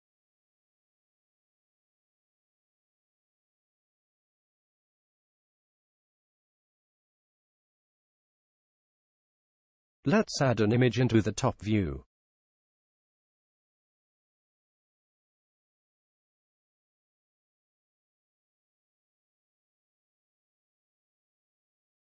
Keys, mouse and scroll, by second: 1.6 n, 4.5-6.4 drag, 12.9-14.5 drag, 14.8-16.5 drag, 16.7 click, 21.9 click.